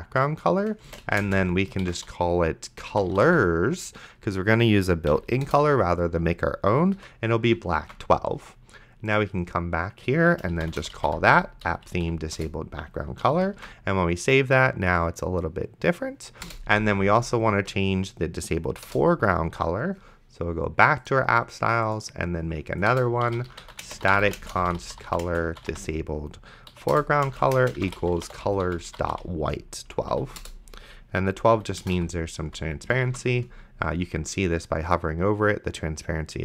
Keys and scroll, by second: 0.8-3.9 typing, 5.1 Down, 5.5 Return, 7.0 ;, 8.1 ctrl+s, 10.6 p, 11.1 h, 11.7 Down, 12.4 Return, 13.2 ,, 13.8 ctrl+s, 16.5 Return, 16.7 d, 18.9 Return, 22.9-26.2 typing, 26.7 Down, 26.9 Return, 27.3-29.6 typing, 30.0 Down, 30.4 Return, 31.5 ,, 31.8 BackSpace, 32.5 ;, 33.3 ctrl+s.